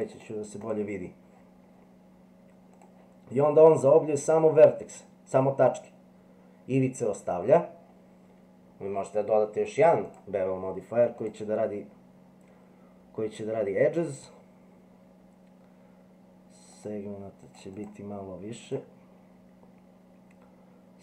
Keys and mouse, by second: 0.0 click, 2.8 click, 4.0 middle click, 10.1-11.3 drag, 16.9 click, 17.4 click, 17.8 click, 18.7 click.